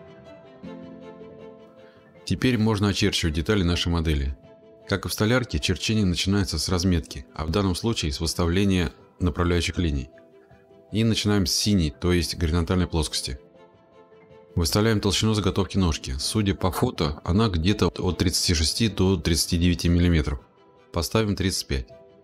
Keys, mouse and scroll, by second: 0.0-0.8 typing, 1.4 click, 2.3-4.2 drag, 4.9 click, 6.3 click, 7.7 middle click, 7.7-9.5 scroll, 9.9 click, 17.8-18.6 typing.